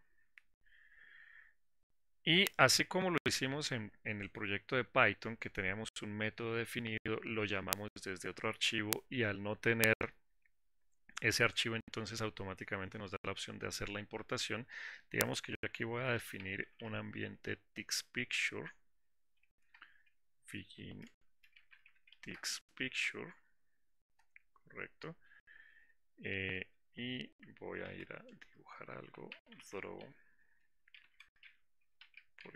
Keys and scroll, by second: 20.8 Return.